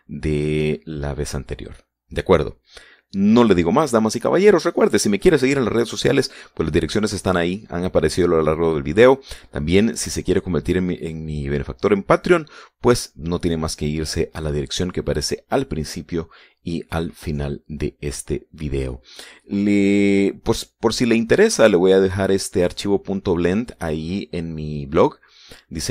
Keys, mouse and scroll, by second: 21.0-21.5 scroll down 2, 21.9-22.5 scroll up 1.